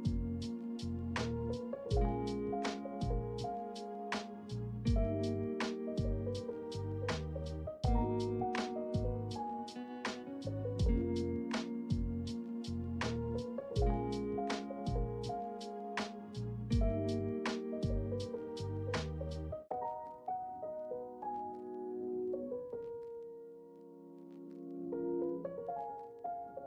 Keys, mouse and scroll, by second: 2.4 shift+middle click, 3.1 ctrl+middle click, 3.6 shift+middle click, 4.3 ctrl+middle click, 5.1 ctrl+middle click, 5.7 shift+middle click, 6.8 ctrl+r, 9.4 middle click, 13.2 ctrl+click, 13.9 shift+middle click, 14.8 Tab, 16.0 middle drag, 16.6-17.0 middle drag, 19.6-20.8 right drag, 20.8-22.0 drag, 24.0-24.6 middle drag, 24.9 ctrl+middle click, 25.6 shift+middle drag, 26.2-26.6 ctrl+middle drag.